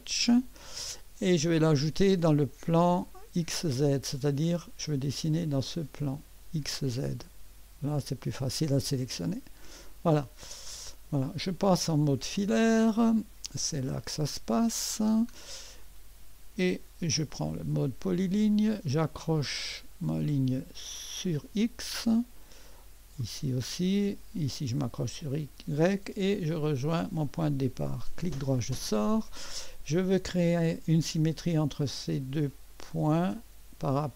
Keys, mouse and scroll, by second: 3.7-4.0 scroll down 1, 7.9 click, 8.6 click, 9.2 click, 10.2-11.6 scroll up 1, 11.2 right click, 13.4 click, 14.6 click, 15.4-16.3 scroll up 2, 17.3 click, 21.2 click, 23.2 click, 24.8 click, 26.8 click, 28.0 right click, 29.1 right click, 30.5-31.5 drag, 32.7 click, 33.9 click.